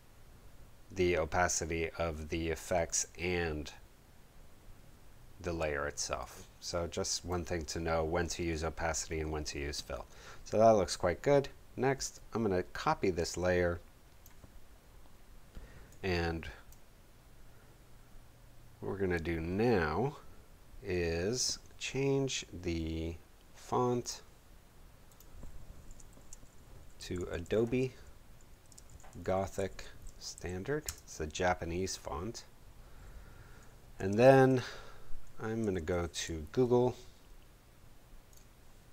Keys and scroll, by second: 26.0 shift+super+a, 27.1-30.0 typing, 30.3 shift+Return, 30.8 shift+Return, 34.2 shift+super+Tab, 37.1 shift+super+Tab.